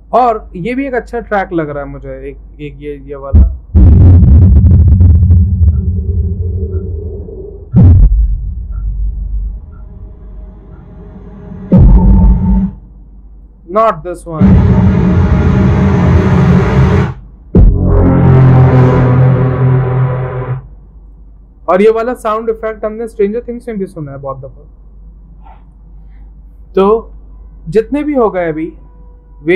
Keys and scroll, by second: 1.6 v, 13.0 c, 17.9 v, 21.7 Delete.